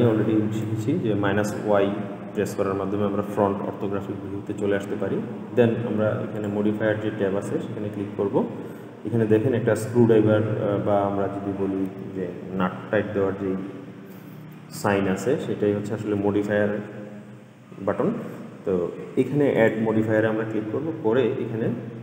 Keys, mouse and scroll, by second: 0.7 click, 6.5 click, 19.7-22.0 drag.